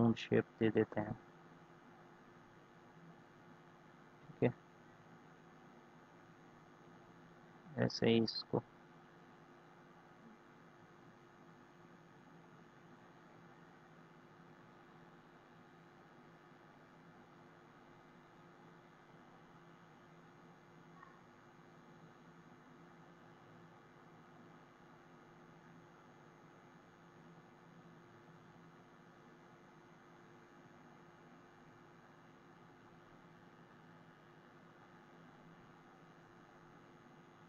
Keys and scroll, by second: 27.7 ctrl+z.